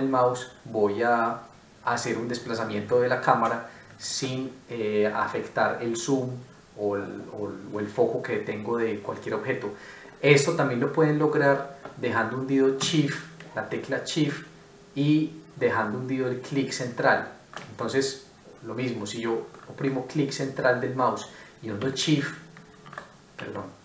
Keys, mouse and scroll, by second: 14.2 shift+middle click, 19.5 middle click.